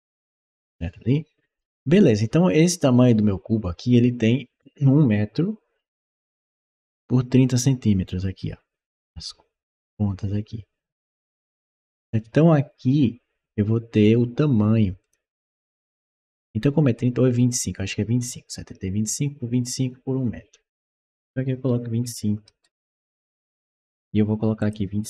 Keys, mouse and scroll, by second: 1.4 click, 12.8 scroll down 1, 14.8 click, 21.9 5, 22.6 Return, 24.4 click.